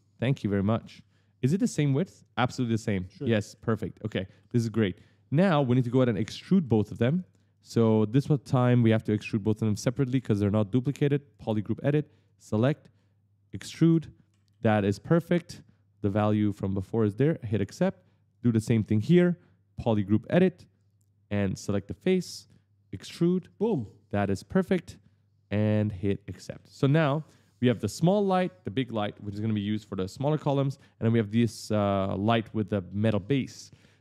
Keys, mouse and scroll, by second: 0.0 click, 0.8 right click, 0.8-3.5 typing, 5.3 click, 5.7 right click, 7.0 click, 7.3 right click, 8.0 click, 9.8 click, 11.1 click, 12.0 click, 13.3 click, 13.8 right click, 16.9 click, 17.3 right click, 17.5 e, 18.1 click, 20.0 click, 21.7 click, 22.7 click, 23.2 right click, 23.3-24.5 typing, 25.8 click, 26.1-27.9 typing, 26.3 right click, 27.5 click, 28.7 click, 28.9 d, 29.3 right click, 30.0 s, 30.0 right click, 31.2 click, 32.4 click, 33.0 right click.